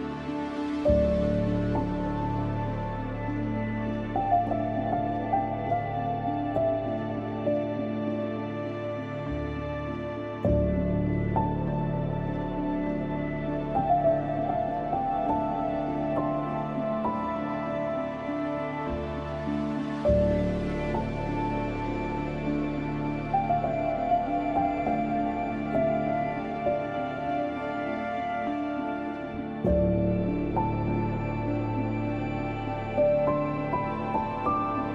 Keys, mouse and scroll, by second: 1.4-3.0 typing, 1.6 click, 4.7 click, 4.7 space, 6.5 scroll down 1, 7.0 scroll up 1, 7.5 click, 12.4 click, 12.8 click, 13.0 space, 13.1-14.9 drag, 14.9-15.3 scroll down 1, 15.3-15.9 scroll up 1, 16.5-19.4 typing, 16.7 click, 17.9-18.5 scroll up 1, 18.8 scroll down 1, 19.2 scroll up 1, 20.0 click, 22.7 right click, 24.1 click, 24.9 scroll down 1, 25.5 scroll up 1, 26.2 click, 27.9 scroll down 1, 28.3-28.6 scroll up 1, 29.1 scroll up 1, 29.2 click, 30.6 scroll down 1, 30.7 scroll up 1, 31.3 click, 32.5 scroll down 1, 33.1 scroll up 1, 33.4 ], 33.7 click, 34.1 scroll down 1, 34.5 scroll up 1.